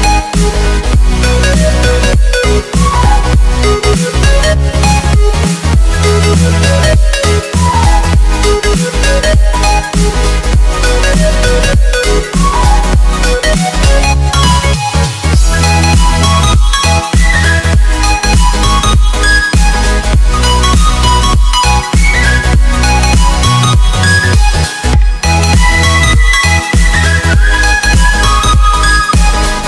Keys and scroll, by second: 0.2 7, 0.9 0, 1.0 Return, 4.7 z, 5.9 x, 7.3 ctrl+z, 10.4 z, 12.1 x, 13.0 z, 16.2 z, 17.2 ctrl+z, 17.3 x, 27.0 x, 28.6 x, 29.0 ctrl+z.